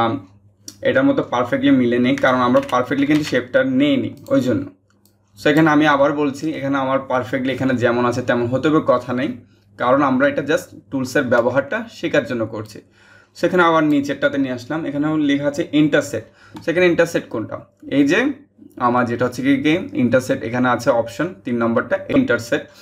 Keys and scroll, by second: 2.7 ctrl+z.